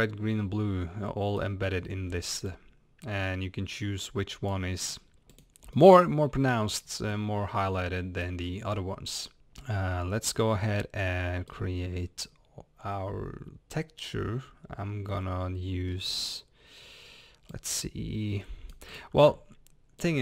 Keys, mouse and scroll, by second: 1.6 scroll up 1, 2.6-4.9 drag, 5.8-7.4 middle drag, 6.7 scroll up 1, 7.5-9.3 middle drag, 8.4 scroll down 1, 9.3 click, 10.2-16.5 middle drag.